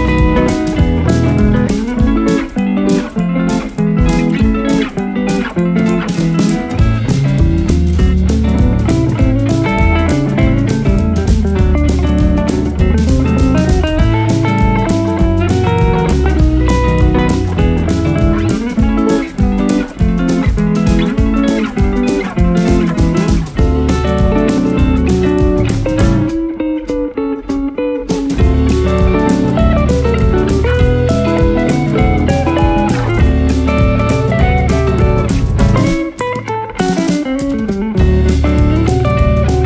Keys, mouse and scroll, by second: 1.6-4.0 drag, 4.0 ctrl+7, 8.0 click, 13.3 click, 13.3 click, 15.4 click, 20.3 click, 24.1 click, 26.7 click, 30.6 click, 32.8-38.9 drag.